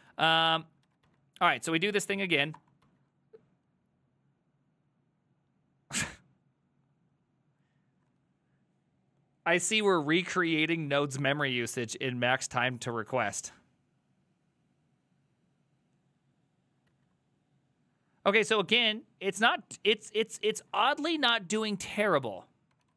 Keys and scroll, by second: 0.1 2, 0.4 ctrl+a, 0.5 3, 0.6 ctrl+a, 0.9 ctrl+a, 1.1 ctrl+a, 2.6 Return, 2.8-3.6 typing, 17.0 alt+{, 20.6 ctrl+a, 20.9 ctrl+a, 22.0 ctrl+c, 22.2 ctrl+c, 22.3 ctrl+c, 22.5-22.9 typing.